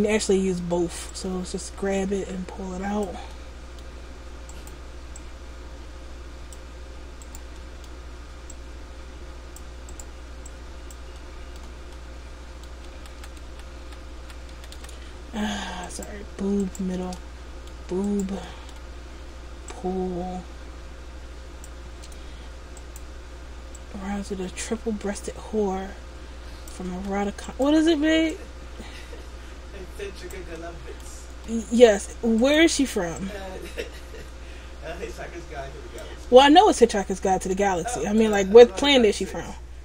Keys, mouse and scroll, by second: 1.2 click, 3.4 middle click, 4.7 right click, 5.3 click, 7.3 right click, 7.7 middle click, 7.7 scroll up 1, 8.6 click, 10.1 right click, 10.5 click, 11.2 middle click, 12.0 middle click, 13.1 ctrl+z, 13.3 ctrl+z, 13.6 ctrl+z, 14.0 ctrl+z, 14.3 ctrl+z, 14.7 ctrl+z, 14.9 ctrl+z, 16.0 right click, 16.7 shift+right click, 17.3 middle click, 18.2 shift+right click, 18.6 middle click, 19.8 click, 22.9 right click, 23.9 click, 27.0 ctrl+z, 27.6 right click, 28.4 click, 30.6 middle click, 31.5 middle click, 32.5 right click, 33.3 click, 36.4 middle click, 38.3 right click, 39.0 middle click.